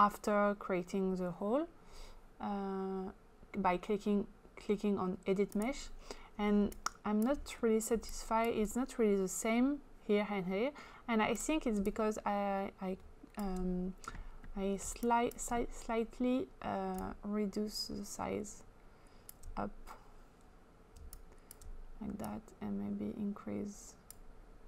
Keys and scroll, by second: 6.6 space, 14.9 space.